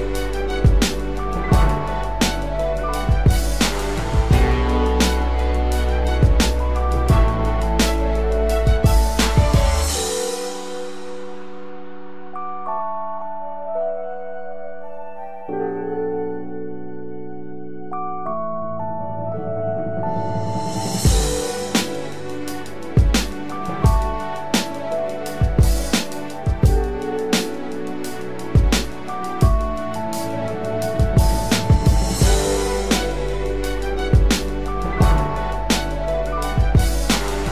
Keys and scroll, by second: 13.2 ctrl+-, 13.6 ctrl+0.